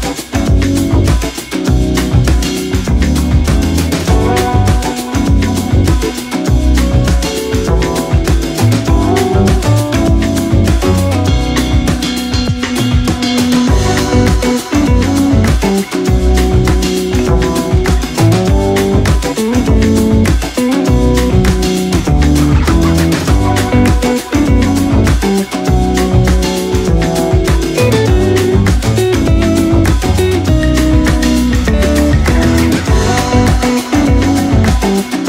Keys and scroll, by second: 6.4 c, 7.1 x, 9.7 8, 9.8 BackSpace, 9.8 7, 9.9 Return, 10.2 shift+c, 12.8 x.